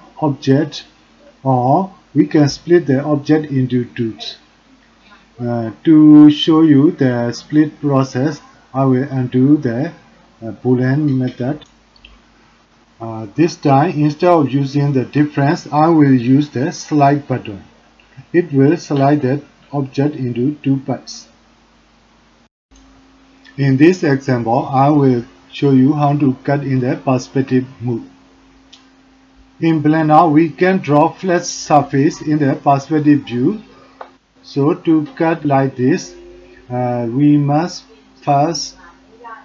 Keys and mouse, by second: 12.7 click, 13.7 middle click, 14.2 middle click, 14.5 click, 17.2 shift+click, 18.2 click, 18.8 click, 19.0 middle click, 20.2 middle click, 20.6 middle click, 20.8 middle click, 21.3 g, 21.6 g, 22.0 middle click, 22.3 shift+click, 24.4 click, 25.7 shift+click, 26.1 click, 29.5-31.6 middle drag, 32.2 shift+middle click, 32.6 middle click, 32.8 click, 36.8 middle click.